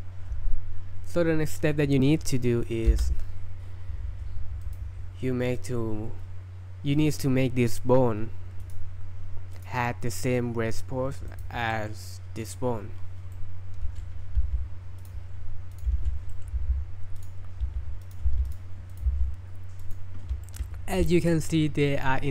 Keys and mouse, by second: 3.1 space, 4.6 click, 5.6 click, 8.7 click, 9.6 click, 11.3 click, 11.7 middle drag, 12.4 click, 13.3-14.0 middle drag, 15.0 click, 15.0 g, 15.9 shift+s, 16.3 middle click, 16.6 g, 17.8 s, 18.3 g, 18.9 click, 19.1 g, 19.8-20.3 drag, 20.4 shift+middle drag, 21.3 middle click.